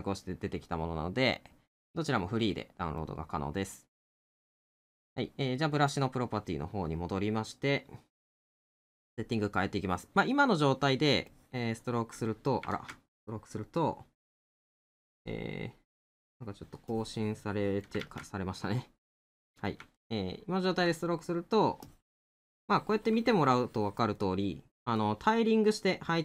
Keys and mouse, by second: 7.5 middle click, 8.9 middle click, 19.3 middle click, 24.2 middle click.